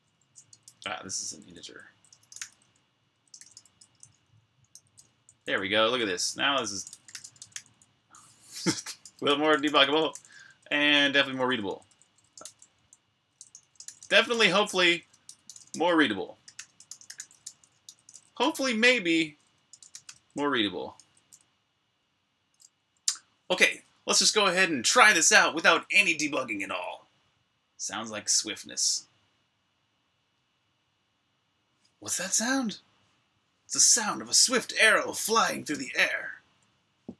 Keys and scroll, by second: 0.0-3.3 typing, 5.4 typing, 10.9 typing, 19.4-20.2 typing, 20.8 super+b, 21.0 Escape, 21.3 super+h, 21.5 Return, 21.5-22.5 typing, 33.9 super+r, 33.9-35.5 typing.